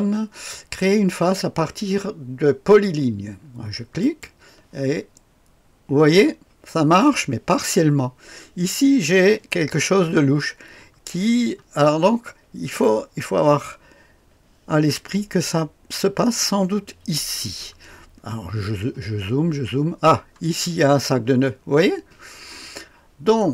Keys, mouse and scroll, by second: 4.0 click, 11.2-12.8 scroll up 3, 12.8 click, 13.1 right click, 13.2 right click, 13.3 click, 18.1-20.1 scroll up 4, 20.6 scroll up 2.